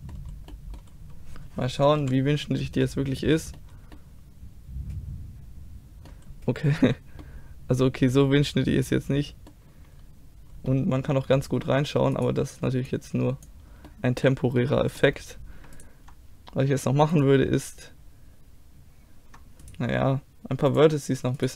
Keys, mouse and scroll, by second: 2.0 KP_5, 3.1-5.9 middle drag, 6.3 middle click, 6.9 a, 8.0-9.2 middle drag, 9.7-10.7 middle drag, 12.2-13.9 right drag, 12.9 click, 12.9 middle click, 13.9 middle click, 13.9 click, 15.8-17.7 middle drag, 17.7-20.7 drag, 21.4-21.5 drag, 21.4-21.5 right drag.